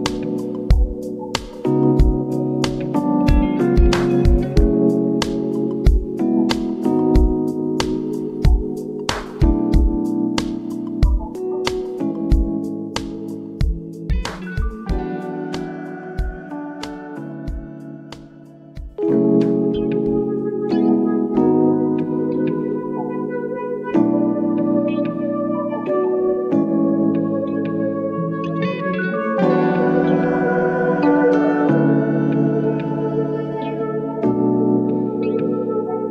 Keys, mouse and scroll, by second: 2.4 ctrl+t, 4.0-6.8 drag, 6.8 Return, 7.8 Up, 10.1 Left, 13.1 Up, 15.9 click, 17.2 v, 17.5 Left, 21.9-24.1 drag, 24.1 Left, 24.5 Up, 25.1 Right, 29.7 click, 29.8-34.0 drag, 34.0 Down, 35.0 Left.